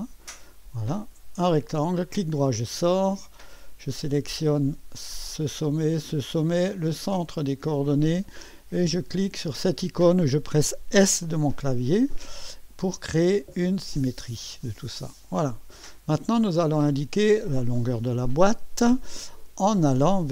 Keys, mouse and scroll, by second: 0.2 click, 1.5 middle click, 3.9 click, 6.0 click, 7.9 click, 10.9 s, 13.5-15.3 drag, 15.8 click, 17.2 click.